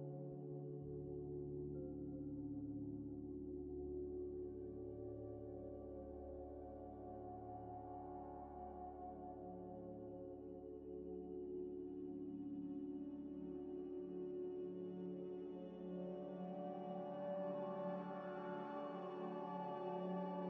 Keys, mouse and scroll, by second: 0.0-3.4 typing, 1.4 scroll down 1, 3.0 scroll, 3.0 scroll up 1, 3.7 scroll up 1, 4.4 middle click, 4.5 scroll up 1, 4.7 scroll down 1, 6.2 scroll down 1, 6.3-7.2 scroll up 1, 7.2 scroll down 1, 7.3 scroll up 1, 7.5 scroll down 1, 7.9-8.8 scroll up 1, 8.8 typing, 9.0 scroll, 9.0 scroll down 1, 9.3 middle click, 11.4-14.3 typing, 14.4 Return, 14.6 Return, 15.4 double click, 17.1 m, 18.1 l, 18.6 e, 18.7 f, 18.9 t, 18.9 Return, 19.0 Return.